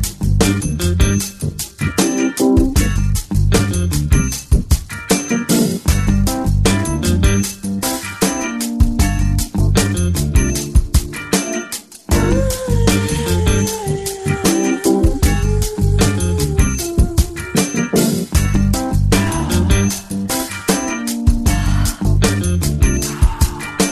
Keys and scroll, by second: 3.8 |, 6.5 x, 7.8 x, 17.9 x.